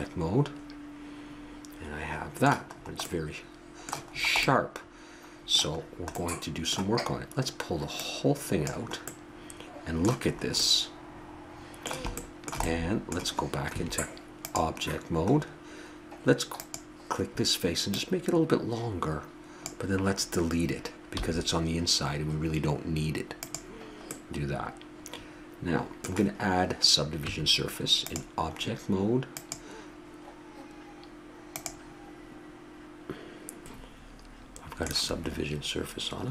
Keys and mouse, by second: 2.9-6.3 middle drag, 8.1-10.7 drag, 13.8 Tab, 16.7-18.4 drag, 21.3 x, 24.8-26.1 middle drag, 27.3 Tab, 29.4-31.2 drag, 36.2-36.3 middle drag.